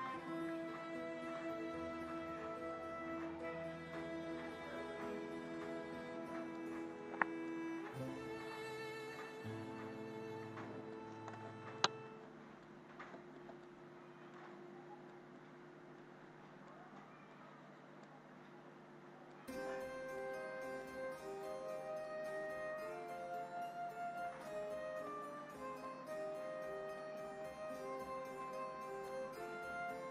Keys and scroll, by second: 11.3 space.